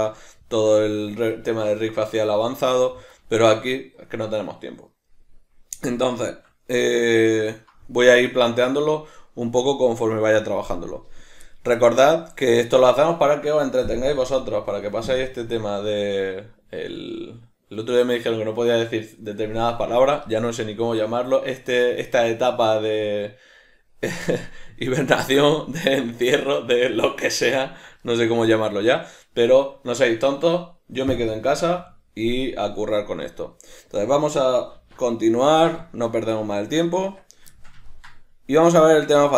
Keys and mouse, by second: 11.6 middle click, 24.5-37.0 middle drag, 34.8 alt+q, 37.0 Tab, 37.6 shift+middle click.